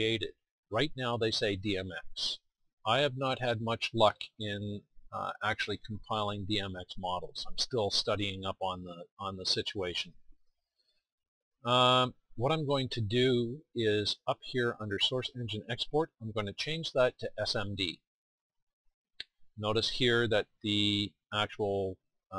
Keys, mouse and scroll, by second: 18.1-20.1 drag.